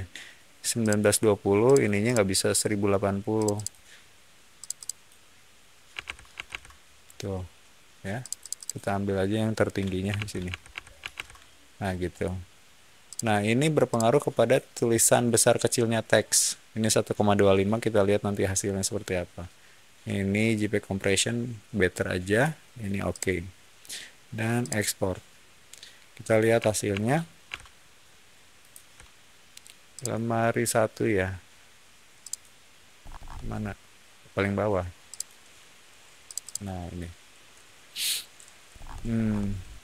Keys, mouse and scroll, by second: 0.7 click, 1.6 click, 2.0 click, 3.3 click, 3.5 click, 4.5 click, 4.7 click, 5.6-6.9 typing, 8.1 click, 8.3 click, 8.5 click, 10.1 ctrl+a, 10.1-11.6 typing, 13.0 click, 13.8 click, 23.0 click, 24.5 click, 26.8 alt+Tab, 28.5 click, 29.9 click, 32.1 click, 32.9 scroll down 1, 35.0 click, 36.2 click, 36.3 click, 38.6 middle click, 38.8 scroll down 1, 38.8-39.2 scroll up 1.